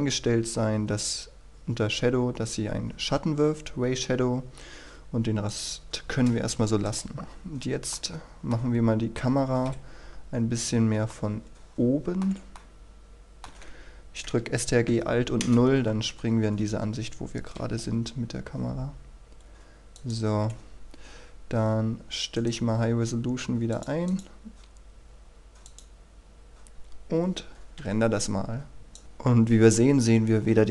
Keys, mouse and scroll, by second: 5.4 click, 6.8 KP_0, 7.1-7.9 scroll down 1, 7.9 middle click, 8.8-9.7 scroll up 1, 9.7 KP_5, 10.3-10.9 scroll up 1, 11.1-13.5 shift+middle drag, 15.4 KP_0, 16.3-17.0 scroll up 1, 19.9 click, 22.3 right click, 23.7 click, 27.7 F12, 28.9 click.